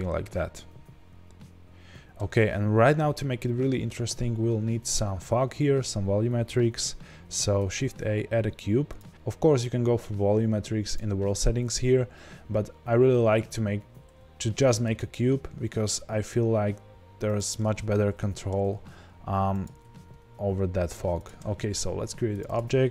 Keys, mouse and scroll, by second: 1.2-5.3 scroll down 1, 8.9 shift+a, 14.8 s, 15.1-17.3 middle drag, 17.3 click, 17.5-18.6 middle drag, 18.6 g, 19.6 click, 19.8 s, 21.2 click, 22.4-22.9 drag.